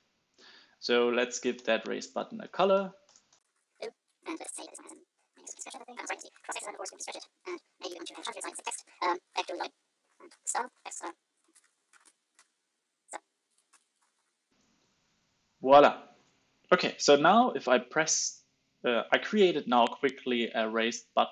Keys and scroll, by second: 5.1 super+Right, 5.3 alt+shift+Left, 5.9 super+z, 6.1 super+z, 7.0 super+s, 9.6 super+s, 12.2 super+s, 12.3 alt+super+l, 12.4 super+s, 13.6 alt+Return, 14.0 super+s, 14.1 alt+super+l, 14.2 super+s.